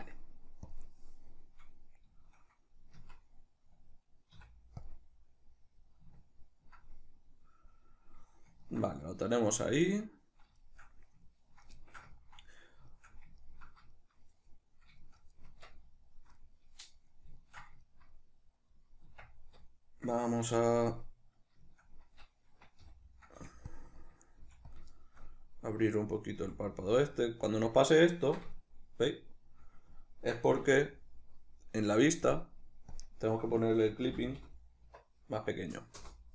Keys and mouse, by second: 2.2-10.2 shift+middle drag, 3.0 Tab, 4.4 q, 12.2-23.8 ctrl+middle drag, 15.5 Tab, 19.1 Tab, 22.9 g, 23.8 click, 24.0 ctrl+middle click, 24.4 f, 24.8 click, 25.0-26.8 shift+middle drag, 26.4 f, 26.8 click, 27.2-32.3 shift+middle drag, 30.6 n, 32.3 click, 33.0-36.3 drag, 36.1 Return.